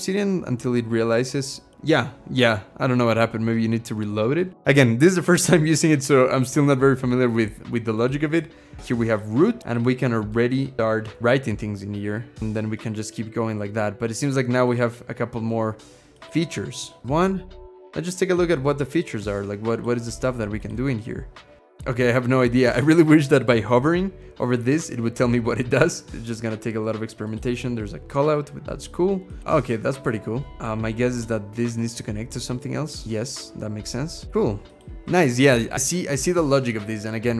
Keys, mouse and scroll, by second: 10.2 middle click, 11.2 ctrl+shift+h, 12.1-12.9 typing, 17.0 1, 17.0 space.